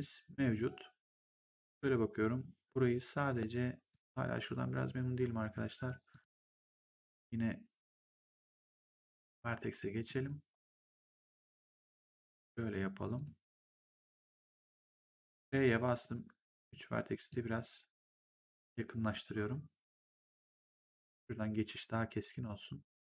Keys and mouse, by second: 3.2 click, 3.8 right click, 6.0 click, 9.1 click, 13.1 shift+click, 14.7 shift+click, 15.0 r, 15.9 click, 17.9 click, 20.8 click.